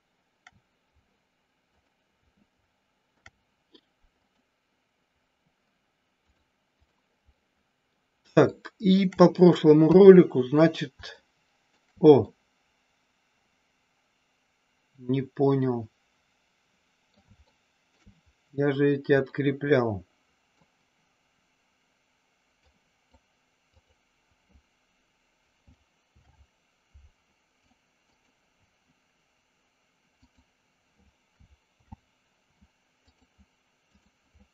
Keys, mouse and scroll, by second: 3.1 ctrl+p, 6.2 click, 7.3 middle click, 8.5 shift+middle click, 9.8 KP_3, 11.1 shift+middle click, 12.2-17.1 middle drag, 17.3 shift+middle click, 19.2-20.6 middle drag, 22.6 click, 23.7 click, 25.9 alt+p, 30.2 click, 31.6 alt+p.